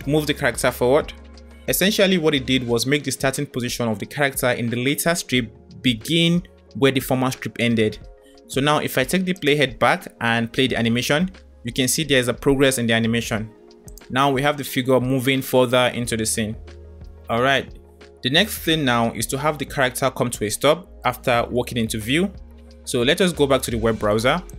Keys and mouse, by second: 9.5 click, 10.3 space, 11.9 space, 13.7 click, 14.0 space, 17.5 space, 18.2 space, 19.7 space, 20.4 space, 20.9 space.